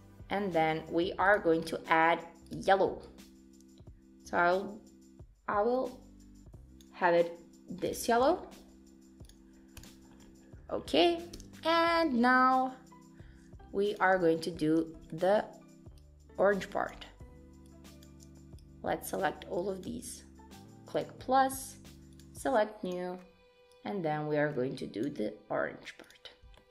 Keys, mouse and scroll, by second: 1.3 click, 2.5 click, 7.9 click, 8.3-9.4 scroll down 5, 9.4 click, 9.4-9.8 scroll down 1, 9.8 click, 10.2-10.8 scroll up 4, 10.8 scroll down 1, 10.8 scroll down 1, 11.4 Tab, 12.1 Tab, 14.0 click, 14.3 shift+middle click, 14.7-15.1 scroll up 5, 15.1 shift+middle click, 16.0 click, 17.7 shift+click, 21.0 click, 22.2 click, 22.8 click, 26.1 click, 26.6 shift+middle click.